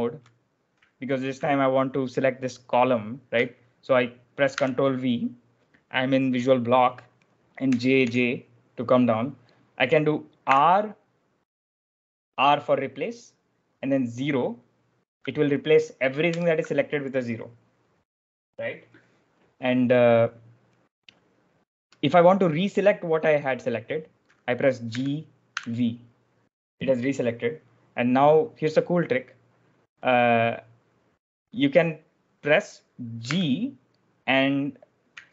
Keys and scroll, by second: 4.4 ctrl+v, 7.5 j, 7.9 j, 10.3 r, 16.2 o, 24.8-25.9 typing, 33.2 g.